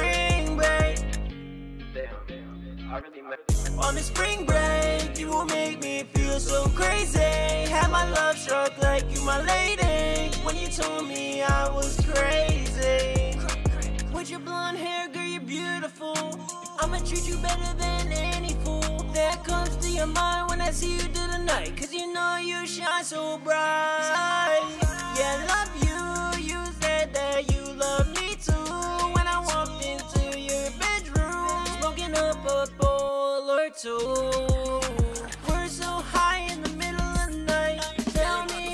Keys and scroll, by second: 2.1-2.9 typing, 3.2 super+Tab, 10.7 super+Tab, 21.5-23.0 typing, 23.2 Return.